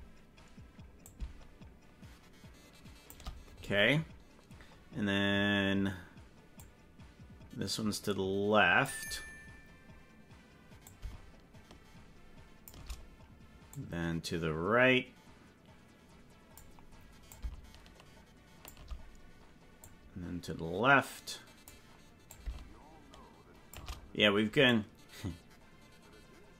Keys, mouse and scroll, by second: 1.0 shift+click, 6.6-8.8 drag, 10.9-12.7 shift+drag, 13.7-16.5 drag, 17.3-18.6 shift+drag, 19.8-21.6 drag, 22.3-23.7 shift+drag, 24.7 click.